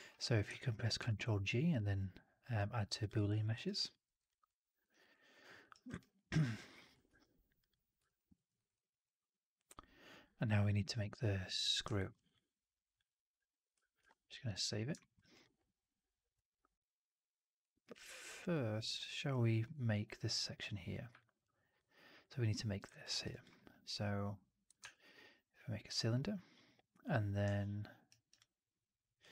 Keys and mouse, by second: 0.9 ctrl+g, 3.4 alt+right drag, 3.7 alt+drag, 3.9 alt+middle drag, 4.1 alt+right drag, 4.3-4.7 alt+drag, 4.8 alt+right drag, 5.0-5.5 alt+drag, 5.6 alt+right drag, 5.9-6.3 alt+drag, 6.4 alt+right drag, 6.6 alt+click, 7.0 ctrl+s, 7.9 alt+drag, 8.2 middle drag, 8.4 right drag, 8.6-8.9 drag, 11.8 alt+middle drag, 12.0 alt+right click, 12.2-12.8 alt+drag, 13.9 ctrl+s, 14.9 middle drag, 15.1 right drag, 15.3-17.5 drag, 17.7 alt+middle click, 18.4-19.5 alt+middle drag, 21.1 alt+click, 23.0 alt+right drag, 23.2 alt+click, 24.7 shift+Tab, 28.0 alt+right drag, 28.2-29.1 alt+drag.